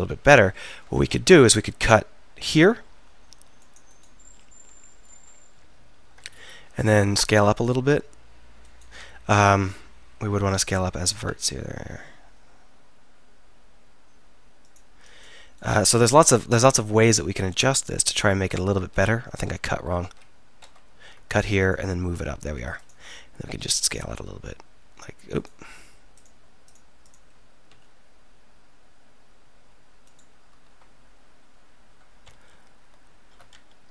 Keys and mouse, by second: 1.8 ctrl+r, 5.1-6.3 drag, 7.3 s, 11.2 s, 15.9-17.5 middle drag, 18.9 ctrl+z, 19.2 ctrl+z, 19.5 ctrl+z, 20.1 ctrl+z, 20.6 ctrl+z, 21.0 ctrl+r, 23.7 s, 27.7 s, 32.3 alt+., 33.6 ctrl+..